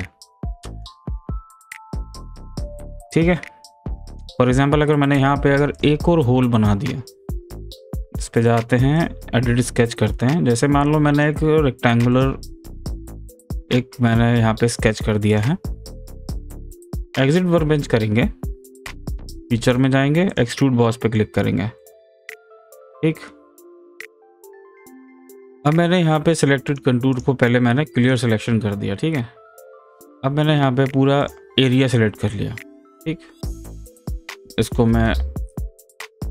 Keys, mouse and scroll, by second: 5.7 click, 7.7 click, 11.2 click, 15.3 click, 17.8 scroll down 1, 18.0 scroll up 1, 18.3-19.6 scroll down 1, 19.6 click, 21.8-24.7 middle drag, 24.7 click, 27.1 right click, 28.0 click, 31.2 click, 34.0 click, 36.2 click.